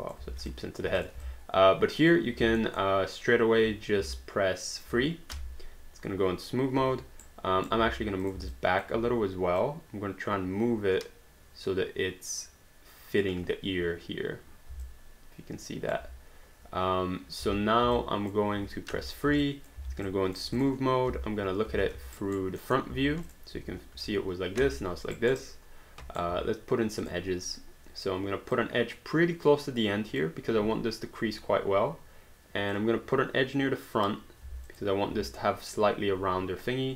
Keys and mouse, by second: 0.3 alt+d, 0.5 alt+click, 1.0 click, 1.3 alt+click, 2.6 alt+middle click, 4.2 alt+click, 5.3 3, 6.8 1, 7.3 right click, 8.2 click, 8.6 alt+click, 9.6 click, 14.9 alt+click, 17.4 space, 18.0 alt+click, 19.0 3, 19.4 alt+click, 19.8 alt+d, 20.1 alt+click, 20.6 click, 21.1 space, 22.2 alt+right click, 22.6 alt+middle click, 23.3 click, 25.1 alt+right click, 27.0 click, 28.6 click, 32.7 click, 34.7 alt+click.